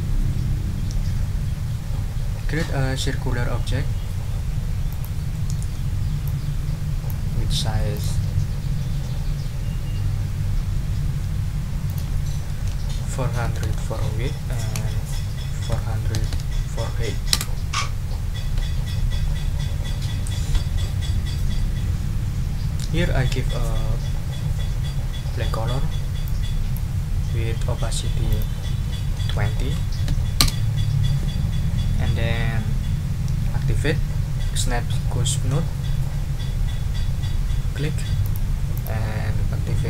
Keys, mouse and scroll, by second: 4.9 click, 5.3 middle click, 6.2-7.2 ctrl+drag, 7.9 click, 11.9 ctrl+click, 12.5 ctrl+a, 13.0 ctrl+4, 13.4 ctrl+0, 14.8 Tab, 15.7 4, 16.1 0, 17.3 Return, 26.2 click, 28.3 click, 29.1 ctrl+a, 29.6 ctrl+2, 30.0 ctrl+0, 30.4 ctrl+Return, 38.2 click, 38.7 click.